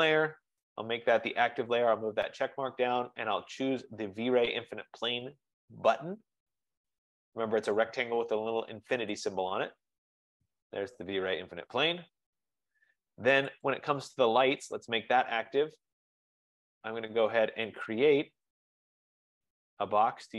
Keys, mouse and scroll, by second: 0.0 click, 0.0 Return, 9.3 click, 13.8 click, 16.6 click, 18.1 click, 19.3 click.